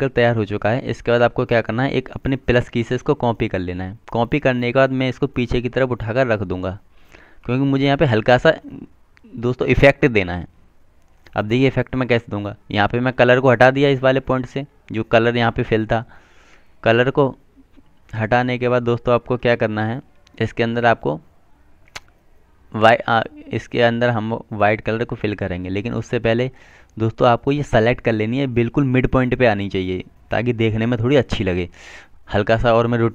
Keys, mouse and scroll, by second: 3.9 click, 12.9 click, 14.9 right click, 19.6 click.